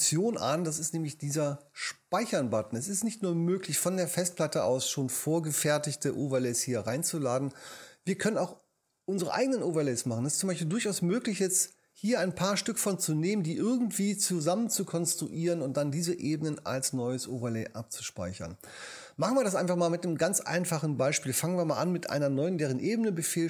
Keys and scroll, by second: 22.8 shift+super+n.